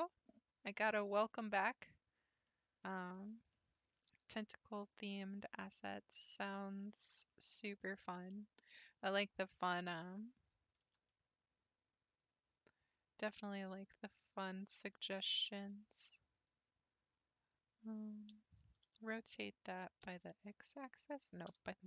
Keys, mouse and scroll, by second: 2.5-5.6 middle drag, 5.6-6.3 scroll up 3, 6.3 middle click, 6.6 scroll down 1, 6.8 shift+scroll up 1, 6.9 shift+middle click, 7.7 ctrl+r, 9.1-10.4 shift+middle drag, 10.4 click, 10.8 g, 15.4-16.4 shift+middle drag, 16.4 click, 17.4 click, 18.8 r.